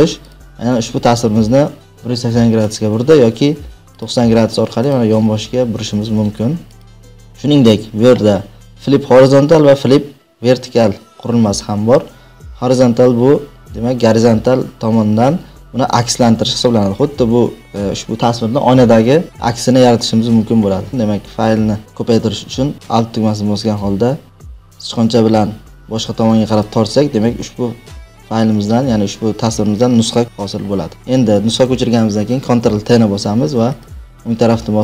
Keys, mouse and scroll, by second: 0.2 click, 2.7 right click, 3.9 click, 5.0 right click, 6.8 click, 7.4 right click, 20.9 ctrl+z, 26.5 alt+click, 32.4 ctrl+t, 33.8 right click.